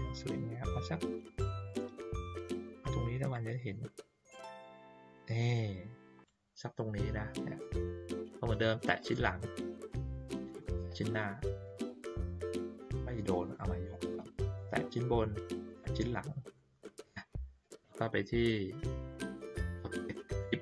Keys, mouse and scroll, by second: 3.3-6.2 drag, 8.8 click, 10.4 shift+click, 13.4 click, 14.4 click, 15.6 shift+click, 19.3 click.